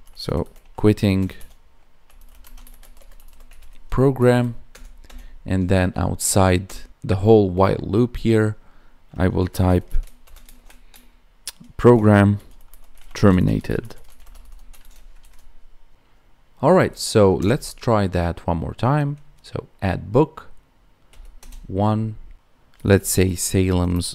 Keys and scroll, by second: 2.4 space, 4.1 Right, 13.1 space, 15.1 ctrl+s, 23.8 space.